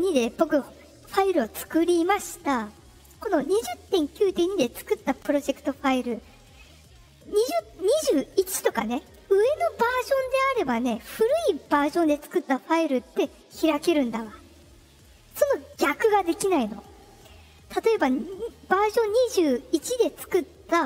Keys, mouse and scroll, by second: 0.0 click.